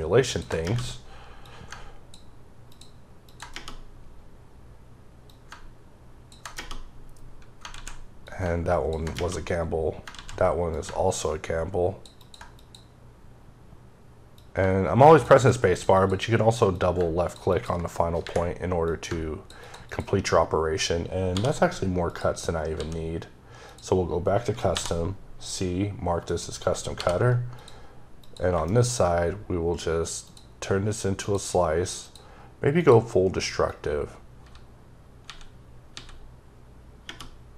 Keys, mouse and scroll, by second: 0.1 double click, 1.2 click, 3.1 double click, 5.1 click, 8.1 click, 10.5 click, 14.2 click, 15.8 double click, 16.6 click, 18.7 click, 21.1 d, 21.9 click, 22.6 d, 23.5 click, 24.5 c, 27.4 click, 28.0 click, 28.5 shift+middle click, 28.8-30.1 scroll up 1, 30.1 click, 31.0 click, 31.8 click, 32.6 click, 33.5 click, 34.2 typing.